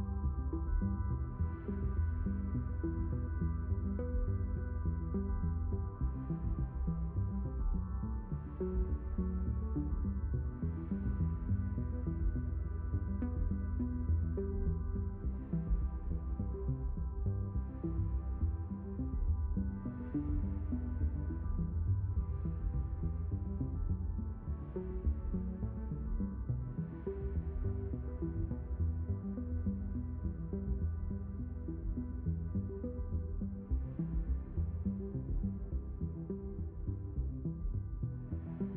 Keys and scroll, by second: 3.3 ctrl+4, 4.8 ctrl+4, 30.1 q.